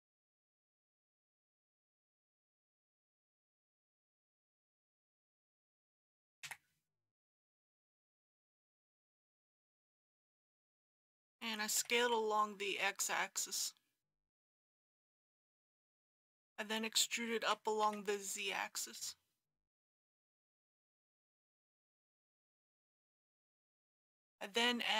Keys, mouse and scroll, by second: 4.6 click, 5.0 ctrl+z, 6.4 ctrl+z, 10.5 click, 11.8 s, 12.0 x, 15.3 click, 15.9-17.4 scroll up 1, 17.4 e, 17.8 z, 22.8 click, 23.7 alt+shift+click.